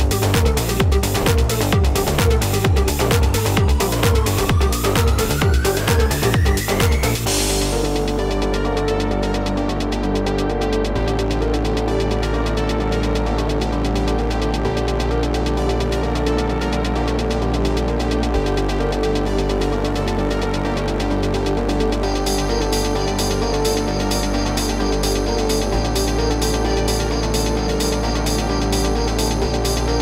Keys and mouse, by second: 19.4 space, 19.9 click, 23.8 click, 25.1-27.0 typing, 27.8 click.